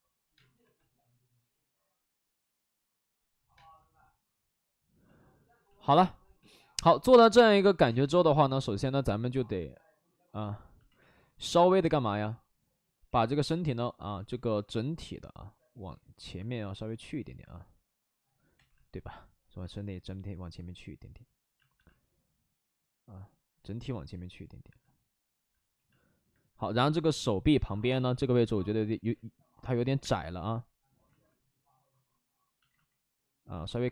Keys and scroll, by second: 0.3 space, 0.5 2, 3.5 space, 10.9 w, 13.0 x, 14.0 ctrl+z, 17.1 ctrl+z, 18.5 2, 27.8 space, 29.0 ctrl+z, 29.7 ctrl+z, 29.9 space, 31.0 ctrl+z, 32.6 ctrl+z.